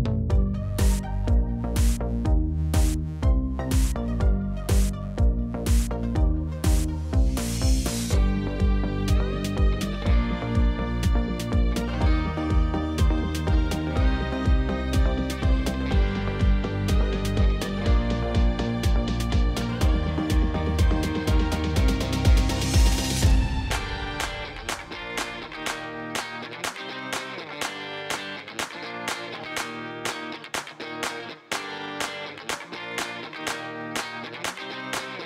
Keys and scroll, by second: 3.6 1, 3.9 shift+z, 5.5 m, 8.3 m, 9.5 shift+z, 11.3 m, 18.9 g, 21.5 g, 31.3 e.